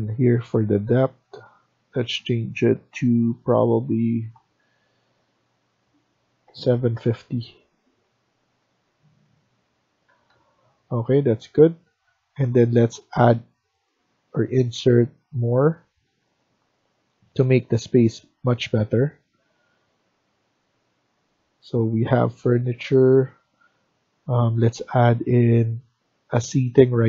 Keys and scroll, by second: 6.1-7.3 typing, 10.0 Escape, 10.2 Escape.